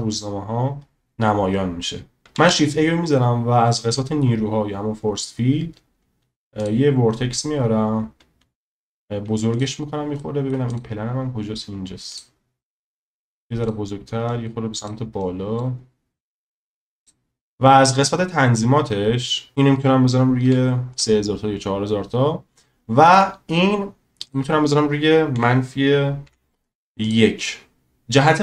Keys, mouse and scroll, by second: 2.3 shift+a, 8.8 s, 10.2-10.5 middle drag, 12.1 click, 13.2 s, 14.3-14.9 drag, 15.2 click, 19.5-21.0 drag, 24.3-27.0 drag.